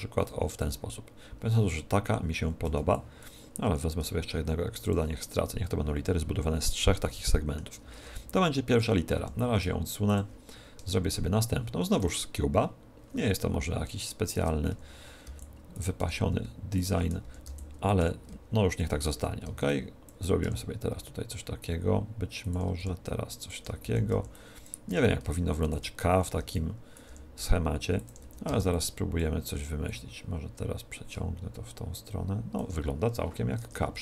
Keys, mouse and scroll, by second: 0.6-2.3 drag, 2.1-3.5 middle drag, 2.3 a, 2.7 b, 3.6 e, 4.8-6.6 drag, 5.6 a, 6.6-8.9 middle drag, 7.9 Tab, 9.1 g, 10.1-11.9 drag, 10.8 shift+a, 14.3 Tab, 14.6 a, 15.2 b, 16.0 e, 16.8-18.6 drag, 17.3 a, 17.4 b, 18.0 e, 18.7-20.5 drag, 19.2 a, 19.4 b, 20.5 e, 22.4-25.4 drag, 22.8 e, 23.8 a, 24.0 b, 24.8 e, 25.6-27.4 drag, 26.0 a, 26.4 b, 27.1 e, 28.0-31.6 drag, 28.2 a, 28.4 b, 33.2 a, 33.6 Tab.